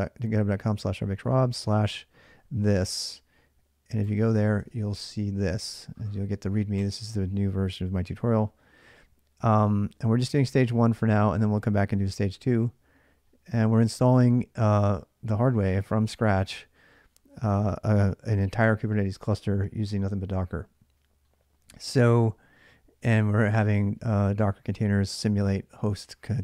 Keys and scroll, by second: 4.4 alt+Tab.